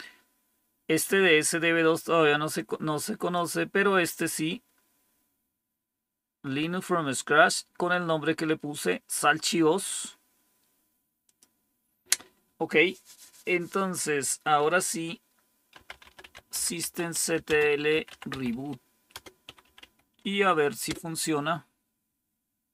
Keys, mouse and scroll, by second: 15.4-20.8 typing.